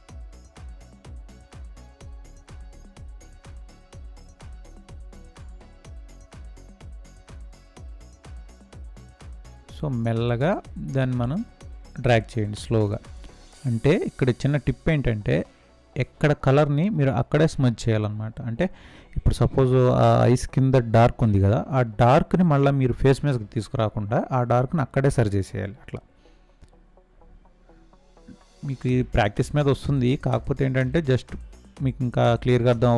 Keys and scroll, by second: 5.6 ctrl+space, 5.9 ctrl+space.